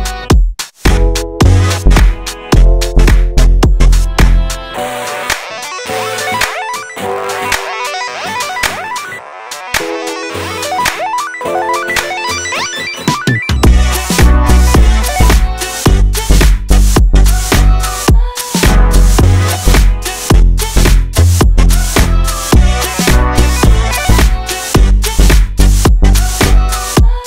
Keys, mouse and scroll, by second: 0.0 2, 0.2 click, 1.0 middle click, 1.6 click, 2.1 Tab, 2.1 scroll down 2, 2.2-3.7 middle drag, 3.7 scroll down 1, 3.8 click, 4.5 KP_7, 4.9 scroll up 2, 5.0-5.4 shift+middle drag, 5.4 click, 6.1-7.1 shift+middle drag, 7.3 Tab, 7.7 a, 7.8 a, 8.1 click, 9.3 click, 9.4-10.2 middle drag, 10.2 KP_7, 10.4 scroll down 1, 10.6 scroll up 1, 10.8 shift+middle click, 11.0 click, 11.6 shift+d, 13.1 shift+middle click, 13.5 shift+d, 14.7 shift+middle click, 15.5-15.9 scroll up 1, 15.9 KP_7, 16.3 KP_3, 16.5-17.0 scroll down 1, 17.0-17.9 drag, 17.9 scroll down 1, 18.0 middle click, 18.6 click, 19.1 shift+middle click, 19.6 click, 19.8 middle drag, 20.0 drag, 20.1-20.9 middle drag, 20.9 r, 21.7 click, 21.8-22.8 middle drag, 22.8 r, 23.7-24.3 middle drag, 24.3 click, 26.1-26.6 middle drag, 26.6-27.1 scroll down 4, 26.8 KP_7, 27.1 scroll up 1.